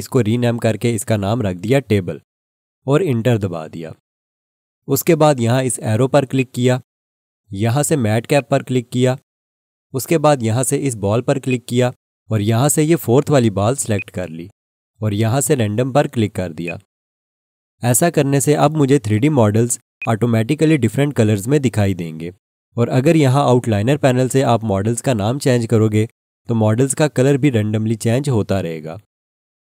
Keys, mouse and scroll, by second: 0.0-1.5 typing, 3.1 Return, 6.3 click, 11.4 click, 20.0 click, 24.3 F2, 24.5 Right, 25.3 1, 25.5 Return, 26.5 F2, 26.6 Right, 27.2 BackSpace, 27.5 Return.